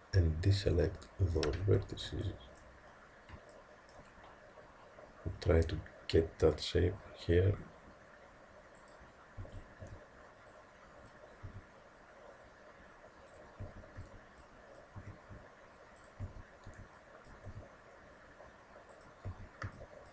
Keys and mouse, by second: 2.3-5.2 middle drag, 7.5 g, 9.5 a, 9.8 b, 11.5 g, 13.7 a, 14.0 b, 15.0 g, 16.3 a, 16.7 b, 17.5 g, 19.3 a, 19.7 b.